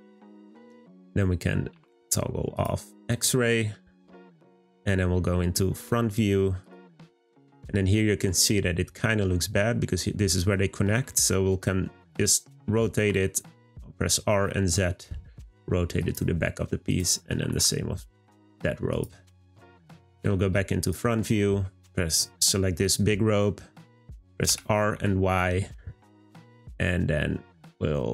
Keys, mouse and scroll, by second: 0.2 click, 1.7 z, 3.0 click, 4.4 click, 7.2-7.5 scroll up 2, 10.5 scroll down 2, 11.1-12.6 middle drag, 12.6 r, 16.9 click, 19.4-20.2 middle drag, 22.0 click, 22.6-24.4 scroll down 2, 24.4 r.